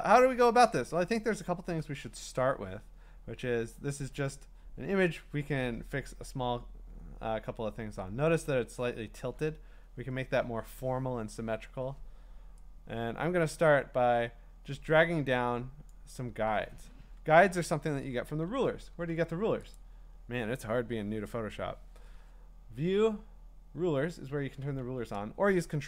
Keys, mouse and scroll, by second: 1.0-1.6 scroll up 4, 2.9 scroll, 5.8-8.8 scroll, 15.9 click, 18.5 ctrl+r, 18.9 ctrl+r, 19.7 click, 24.8 Escape.